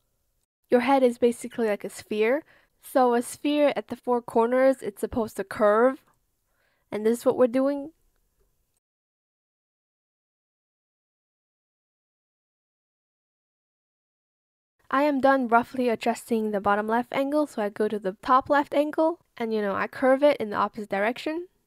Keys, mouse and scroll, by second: 0.1 shift+click, 1.0 shift+click, 4.4 shift+click, 5.2 shift+click, 6.1 shift+click, 8.4 shift+click, 9.0 shift+click, 10.0 shift+click, 13.7 shift+click, 14.4 shift+click, 15.0 ctrl+z, 17.9 shift+click, 18.7 shift+click, 19.4 shift+click, 20.2 shift+click, 21.5 shift+click.